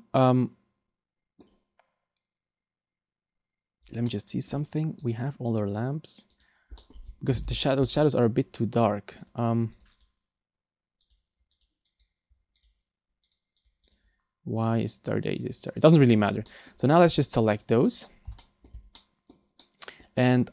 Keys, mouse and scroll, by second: 3.9 scroll down 2, 4.0 middle click, 5.0 right click, 5.5 right click, 6.4 right click, 6.8 middle click, 15.8 click, 16.4 scroll down 2, 16.5 middle click, 16.7-17.4 scroll up 8, 17.6 right click, 18.0 right click, 18.4 shift+middle click, 18.9 scroll up 1, 19.0 middle click, 19.5 scroll up 1, 19.6 middle click.